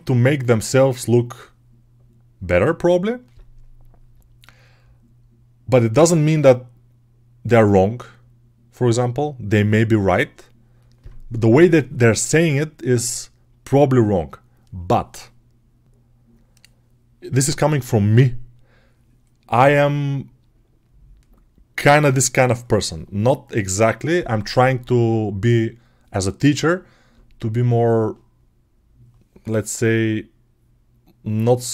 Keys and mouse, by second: 15.0-21.0 right drag, 21.0-31.7 drag.